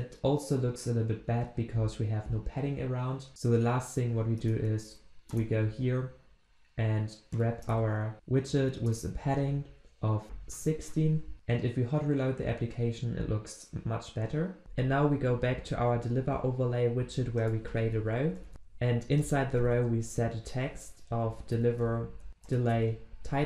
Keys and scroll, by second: 3.3 alt+Return, 22.5 Return.